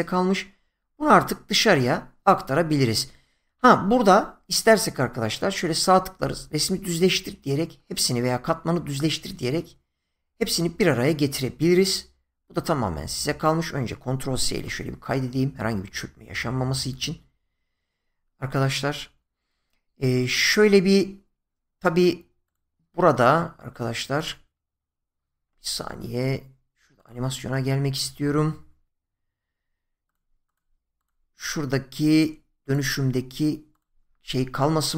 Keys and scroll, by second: 14.5 ctrl+s.